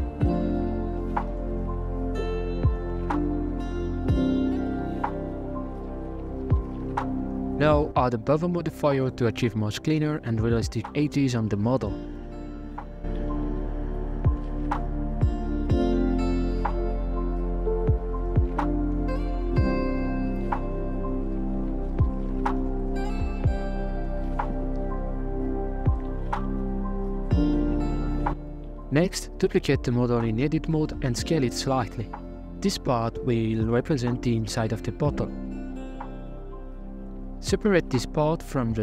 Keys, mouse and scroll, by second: 0.0 scroll down 3, 0.2 shift+middle click, 0.8 scroll down 2, 0.9 Tab, 1.4 alt+right click, 2.6 KP_1, 3.7 e, 4.7 Tab, 5.0 scroll down 4, 5.3-7.1 shift+middle drag, 7.1 click, 8.0 click, 8.7 middle click, 9.6-10.7 drag, 10.7 middle click, 10.8-13.8 shift+drag, 14.8 scroll up 3, 15.1 Tab, 15.4 middle click, 15.9 scroll up 1, 16.0 ctrl+b, 18.5 KP_1, 19.4 g, 20.6-21.9 middle drag, 21.9 Tab, 22.0 g, 23.2 Tab, 23.3 alt+right click, 24.1 g, 25.9 Tab, 26.7 KP_1, 26.9 KP_5, 27.5 a, 28.5 scroll down 1, 28.7 middle click, 29.4 shift+d, 30.5 middle click, 30.6 KP_1, 31.0 s, 33.8 s, 35.6 middle click, 36.5 right click, 36.5 l, 37.0-37.3 scroll up 2, 37.3 scroll down 2, 38.0 p.